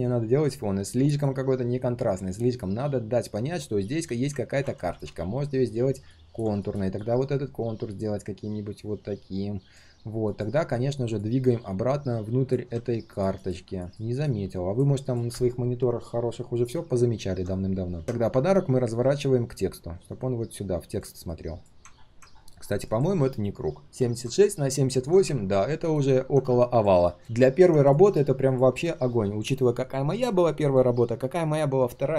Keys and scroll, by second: 4.4 ctrl+z.